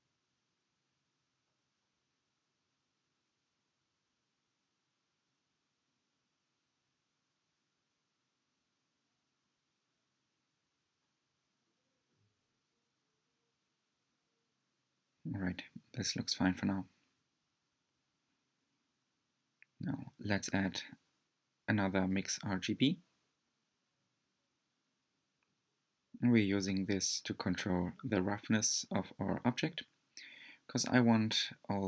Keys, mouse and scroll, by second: 1.8 click, 6.5 click, 15.2 scroll down 1, 15.5-18.6 middle drag, 19.4 scroll down 2, 30.3 click, 31.3 click.